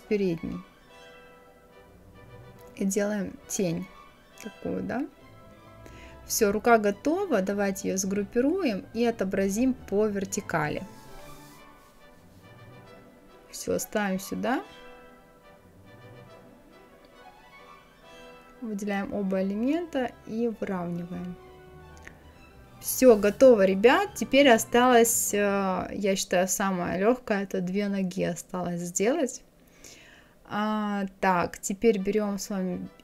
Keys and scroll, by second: 25.4 Right.